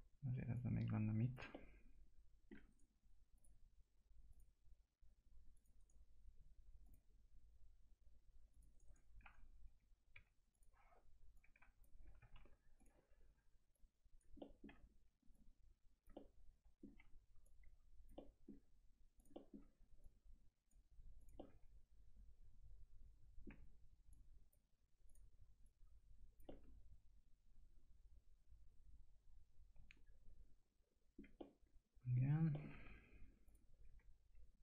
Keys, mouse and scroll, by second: 1.5 alt+middle click, 2.7 right click, 3.4 click, 5.8 right click, 6.8 click, 8.7 right click, 9.2 F3, 9.6 1, 10.5 click, 11.6 F3, 12.3 ctrl+z, 12.8 click, 14.4 alt+middle click, 15.3 click, 16.1-17.4 alt+middle drag, 17.4 click, 18.1 alt+middle click, 19.2 click, 20.0 click, 21.2 click, 21.4-24.1 alt+middle drag, 24.1 click, 26.8-32.5 alt+middle drag, 32.8 2, 33.5 click.